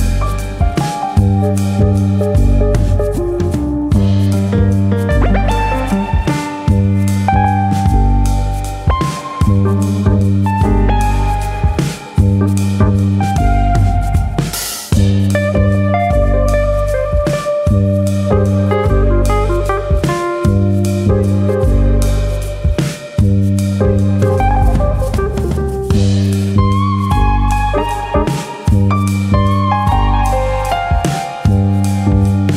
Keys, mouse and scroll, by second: 1.6 shift+d, 2.5 click, 3.1 r, 4.0 click, 4.6 click, 5.8 middle click, 6.3 scroll up 1, 6.4 middle click, 6.8 middle click, 7.6 middle click, 8.6 alt+click, 9.6 alt+s, 10.9 right click, 11.5 click, 12.1 alt+s, 13.7 click, 13.9 middle click, 14.5 middle click, 14.8 shift+middle click, 15.7 shift+middle click, 15.7 1, 16.0 click, 16.2 middle click, 16.8 click, 18.8 shift+click, 19.3 s, 21.6 click, 21.8 middle click, 22.3-23.6 shift+scroll up 4, 22.8 shift+middle click, 23.7 2, 23.8 click, 24.4 click, 27.2 middle click, 27.9 shift+middle click, 28.2 middle click, 29.1 click, 29.3 middle click, 29.9 shift+click, 30.2 middle click, 30.8 click, 31.4 middle click, 31.9 click, 32.3 shift+click.